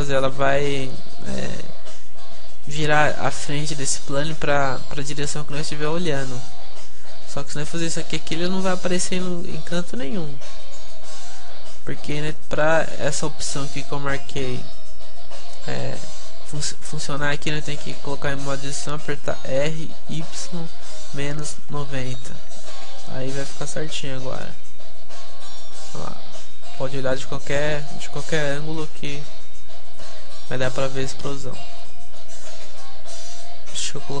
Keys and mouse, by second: 8.5 p, 9.1-10.7 middle drag, 11.4-18.4 middle drag, 11.4 p, 18.4 Tab, 19.7 r, 22.8 Tab, 23.0-24.8 middle drag, 27.1 middle click, 32.0-34.2 middle drag.